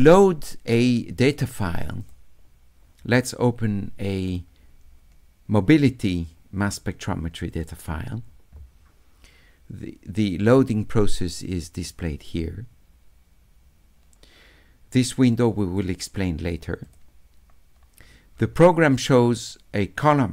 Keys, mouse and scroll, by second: 2.0 click, 4.2 click, 6.1 middle click, 7.5 click, 7.6 click, 15.4 click, 16.8 click, 19.3-20.3 drag.